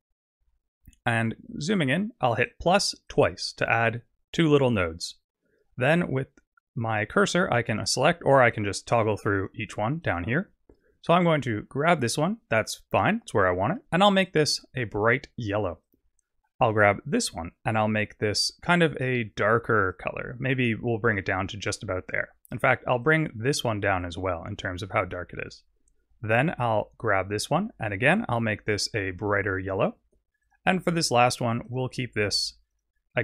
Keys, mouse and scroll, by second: 0.4-1.6 scroll up 10, 1.6-2.5 scroll up 1, 2.5 click, 2.5 scroll up 2, 3.1 click, 5.8 click, 7.8 click, 8.5 click, 8.9 click, 9.3 click, 10.1 click, 13.4 click, 16.7 click, 17.6 click, 22.5 click, 23.1 click, 26.6 click, 27.5 click, 31.6 click, 32.7 click.